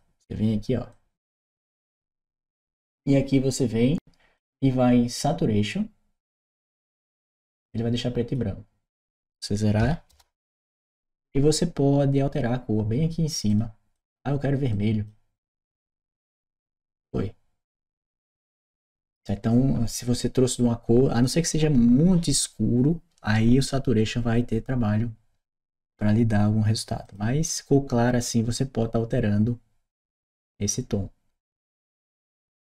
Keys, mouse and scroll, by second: 0.7-1.7 drag, 4.1 click, 6.1 click, 7.0-8.1 drag, 8.8 click, 13.3 click, 13.8 click, 14.6 click, 26.8 click, 31.3 click.